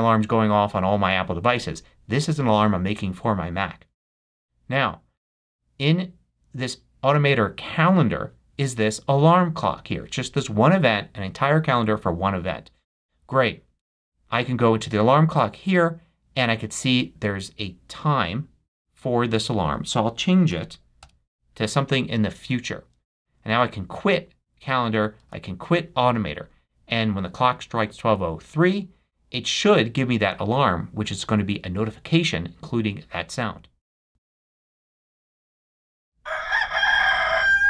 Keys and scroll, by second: 20.3-21.2 typing, 23.6 super+q, 25.3 super+q.